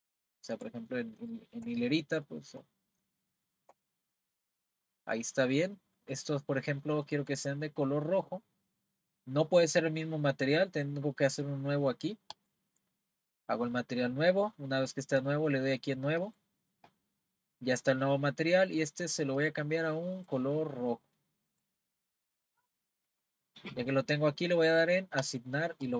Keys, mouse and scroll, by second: 1.2 shift+click, 1.9-3.0 middle drag, 3.3 shift+click, 4.1-7.4 middle drag, 7.4 scroll down 1, 8.0-8.7 scroll up 5, 12.3-15.3 drag, 16.2-17.1 drag, 17.1-18.1 scroll down 1, 18.6 click, 19.4 click, 23.7-24.7 scroll up 1, 24.7-25.2 scroll up 1, 25.2 click.